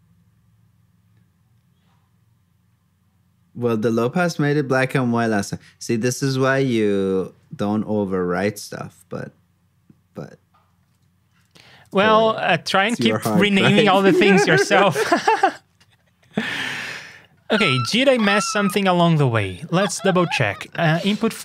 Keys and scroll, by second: 10.8 super+Tab, 11.8 super+j.